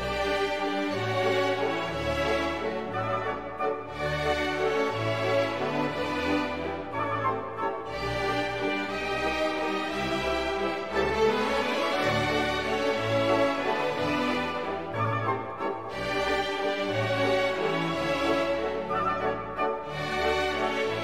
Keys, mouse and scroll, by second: 1.2 -, 3.8 x, 4.4 0, 6.9 1, 9.0 shift+BackSpace, 10.3 shift+space, 10.5 1, 11.7 /, 12.2 1, 15.4 shift+=, 17.2-18.2 typing, 20.1 1.